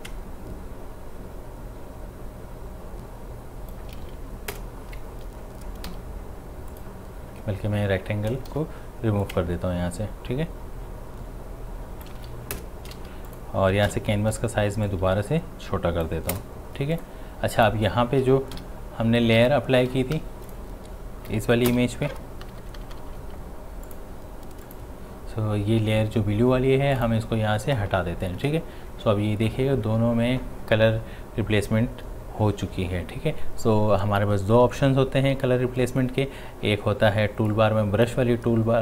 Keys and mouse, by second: 4.5 Return, 5.9 v, 6.7 click, 8.5 ctrl+t, 9.2-12.5 drag, 12.5 Return, 13.3 click, 13.9 c, 14.9-16.3 drag, 16.3 Return, 16.9 click, 18.6-19.2 typing, 20.5 click, 21.7 v, 23.9 click, 27.0 click, 37.5-38.8 drag.